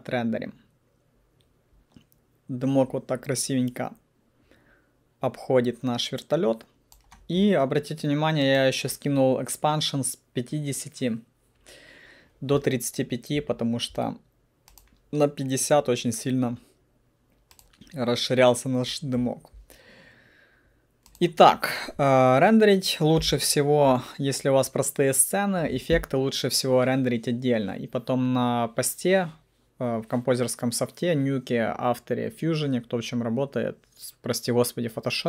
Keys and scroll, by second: 23.3 p.